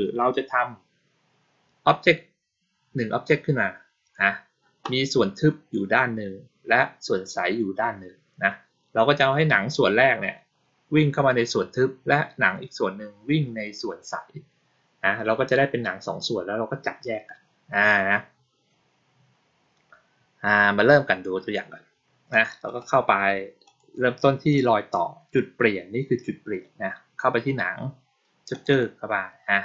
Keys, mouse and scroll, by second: 22.2 click, 22.5 right click, 23.5 click, 28.4 click, 28.6 click.